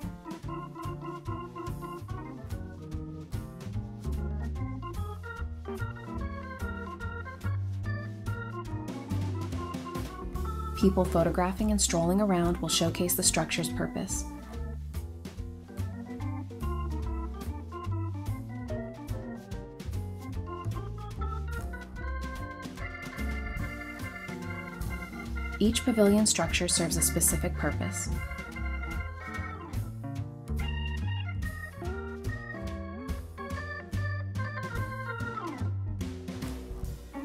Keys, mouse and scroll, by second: 0.0-0.8 typing, 0.4-0.7 scroll up 1, 1.8 scroll down 1, 2.0-5.5 typing, 4.7-5.1 scroll down 1, 5.3-5.8 scroll down 2, 5.8 middle click, 8.8-10.9 typing, 9.9 scroll up 1, 11.5 middle click, 11.7 scroll up 1, 11.9 middle click, 12.2 typing, 13.0 scroll down 1, 13.1 middle click, 13.6-14.0 scroll up 1, 14.6-15.9 typing, 16.0 Return, 16.3 scroll down 1, 16.4 middle click, 17.1-17.4 scroll down 1, 17.4 middle click, 17.8 shift+middle click, 18.7 scroll down 1, 21.5 g, 22.6-23.3 typing, 23.1 scroll up 1, 24.6 scroll up 1, 24.7 typing, 25.3 middle click, 26.0-28.0 typing, 26.5 middle click, 26.9 scroll up 1, 27.5 scroll down 1, 27.7 middle click, 29.2-29.7 scroll down 1, 29.7 y, 30.2 middle click, 30.5 shift+middle click, 32.0 scroll down 1, 32.1 middle click, 33.1 typing, 34.1 middle click, 34.5-34.9 scroll up 1, 34.9 middle click, 35.2 scroll up 1, 35.3-36.9 typing, 36.3-36.6 scroll up 1, 36.6 middle click.